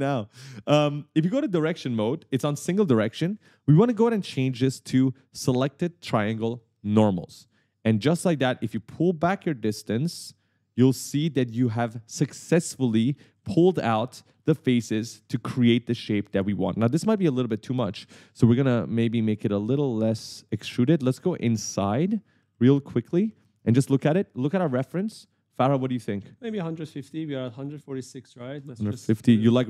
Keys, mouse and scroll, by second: 4.4 click, 7.0 click, 9.0 click, 12.9 right click, 14.2-17.9 typing, 17.7 right click, 19.4 click, 20.9 right click, 20.9 w, 21.4-21.8 scroll up 1, 22.0 d, 25.7 middle click, 27.3 right click, 28.3 click.